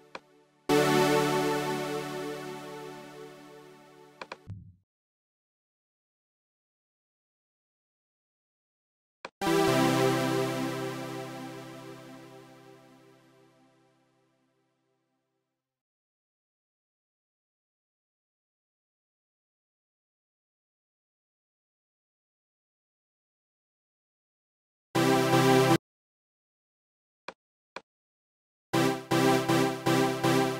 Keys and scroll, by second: 11.1 shift+Right, 15.8 shift+super+Left, 18.6 shift+super+Right, 19.8 shift+super+Left, 20.2 shift+Right, 25.9 shift+Tab.